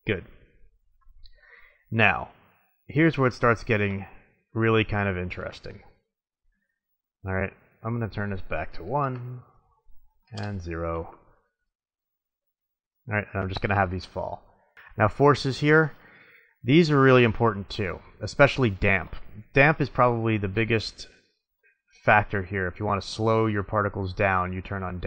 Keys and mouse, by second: 0.0 click, 1.4 middle click, 3.3-4.3 middle drag, 4.8-8.2 drag, 11.4 middle click, 14.9-17.0 middle drag, 22.2-23.0 middle drag, 24.9-25.0 middle drag.